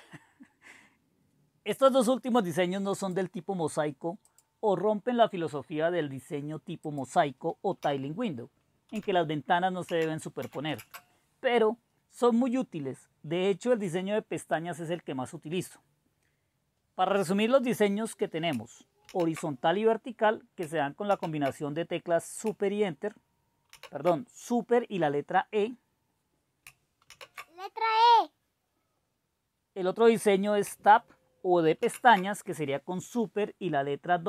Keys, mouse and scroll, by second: 3.0-4.1 drag, 4.2-5.7 drag, 6.8-8.1 drag, 7.9 typing, 8.9 typing, 9.9-10.4 typing, 10.8 Return, 13.7 click, 19.1 super+e, 21.1 super+e, 23.7 super+e, 27.2 super+e, 31.8 super+w.